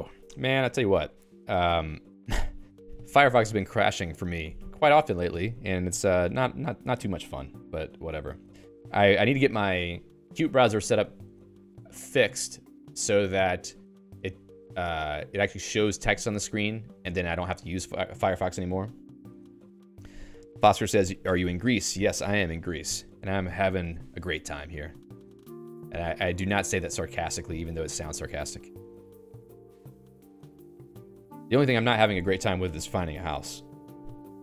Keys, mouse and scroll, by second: 1.5 q, 2.7 click, 25.5 click, 26.5 Escape, 27.1 Up, 27.7 Escape, 28.1 Up, 28.9 Up, 29.1 Page_Up.